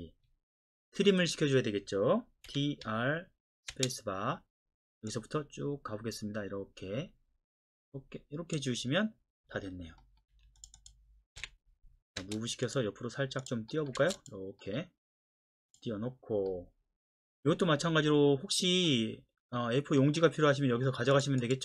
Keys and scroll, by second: 2.5 typing, 3.7 typing, 10.3 Escape, 12.2 space, 14.0 space.